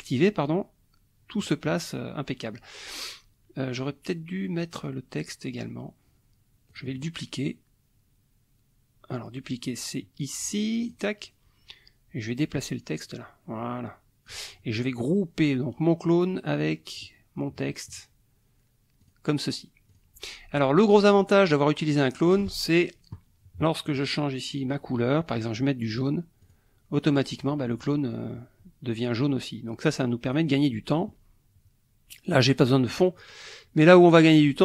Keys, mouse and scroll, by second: 6.7 click, 10.8 click, 12.2-14.5 drag, 14.8-17.2 ctrl+drag, 19.0 click, 19.9 click, 21.1 click, 22.3 click, 26.0 click, 26.4 click, 30.2 click, 33.2 click, 34.0 click.